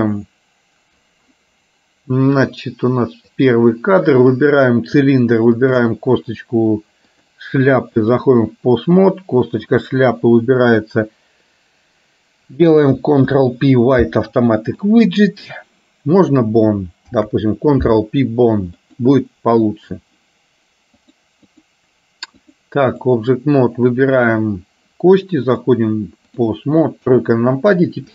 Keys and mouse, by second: 2.7 click, 3.5 click, 4.5 click, 5.7 shift+click, 7.2-8.5 drag, 13.3 ctrl+p, 17.2 ctrl+p, 21.2 click, 22.6 click, 25.6-26.7 drag, 27.1 KP_3.